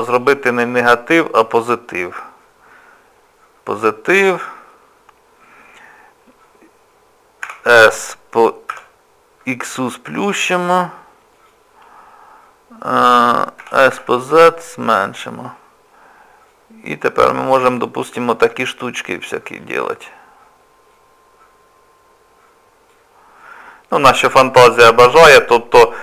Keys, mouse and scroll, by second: 0.5 scroll up 1, 0.5-2.0 scroll down 1, 2.0 click, 7.5 s, 13.6 s, 16.5 click, 18.6 click, 20.9 click, 23.6-24.0 scroll up 2, 24.1 middle click, 24.8 middle click, 25.7 middle click.